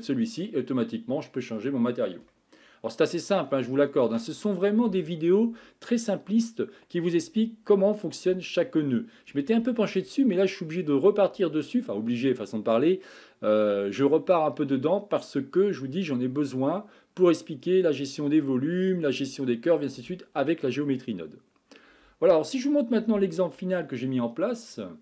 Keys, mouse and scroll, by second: 0.4-25.0 middle drag.